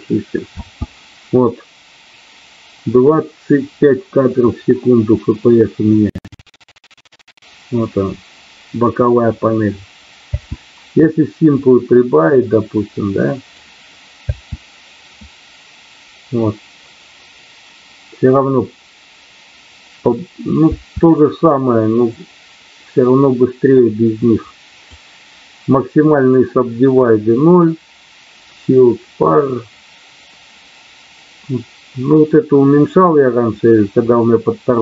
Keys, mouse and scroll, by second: 0.4 space, 10.3 space, 11.5-13.4 drag, 14.1 space, 20.7 space, 22.2-24.9 drag.